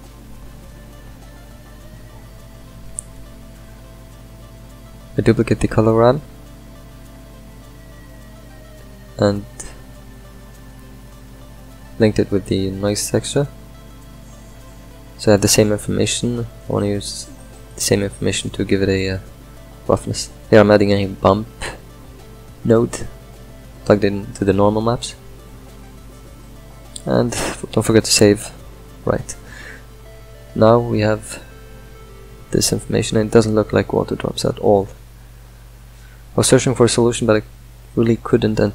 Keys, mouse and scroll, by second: 2.5 click, 3.7 shift+d, 5.5 drag, 23.0-24.9 middle drag, 24.9 ctrl+shift+click, 27.4 ctrl+s, 28.7-35.2 ctrl+middle drag, 35.2 click, 37.7 click.